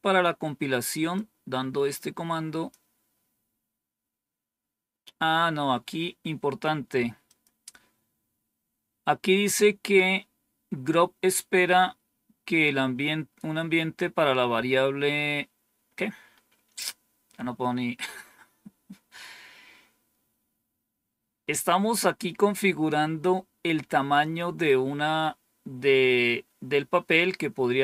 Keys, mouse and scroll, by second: 1.0-2.6 drag, 7.1 click.